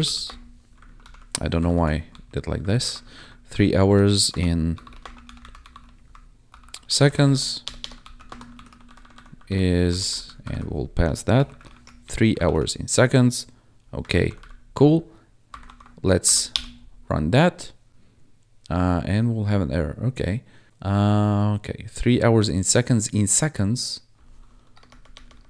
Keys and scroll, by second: 0.0-0.5 typing, 0.8 ctrl+Left, 1.6 ctrl+shift+Right, 2.0 3, 2.6 ctrl+Right, 3.1 ctrl+Left, 3.8 ctrl+Right, 4.2-8.2 typing, 7.1 Right, 8.0 ctrl+s, 8.5 ctrl+s, 8.8 ctrl+Right, 9.8 Left, 10.4 shift+Left, 11.1-12.1 typing, 12.4 ctrl+s, 14.0 ctrl+Down, 15.6 ctrl+`, 16.2 Up, 16.4 Return, 24.7 BackSpace.